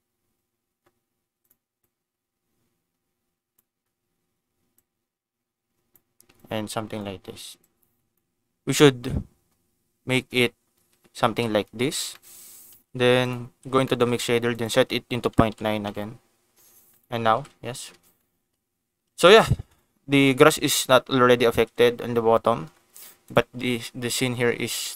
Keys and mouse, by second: 1.8-3.6 drag, 4.8-5.9 drag, 6.4 click, 7.6 click, 11.2 ctrl+s, 12.1 click, 13.2 ctrl+shift+click, 13.8 click, 14.5-16.7 drag, 16.9 click, 17.3 ctrl+s, 18.1 shift+middle click, 19.7 click, 20.6 click, 21.5 ctrl+s, 23.7 g, 24.7 right click.